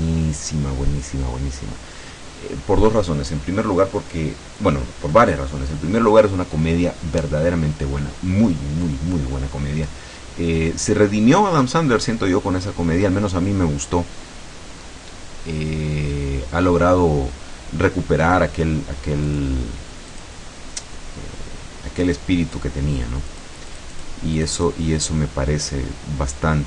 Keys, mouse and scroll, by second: 0.0 click, 19.3 click, 20.2 click, 20.9-22.3 scroll down 1, 22.3 click, 23.3 click, 23.8 click, 24.5 click, 26.4-26.6 drag.